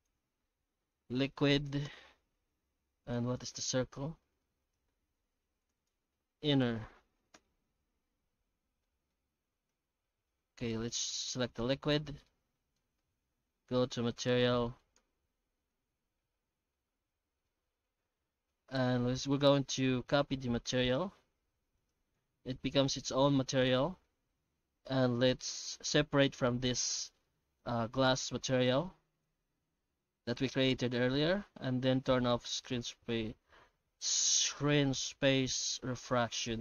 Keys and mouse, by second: 3.9 g, 5.8-7.9 drag, 6.9 n, 8.8 middle click, 9.3 alt+a, 9.5 right click, 11.5 click, 12.2 alt+middle click, 13.0 z, 14.6 shift+middle drag, 14.9 z, 16.5 shift+z, 16.9 shift+z, 17.5 alt+shift+z, 20.1 alt+x, 21.2 g, 22.1 alt+x, 26.7 middle click, 27.2-27.6 middle drag, 33.7-35.2 middle drag.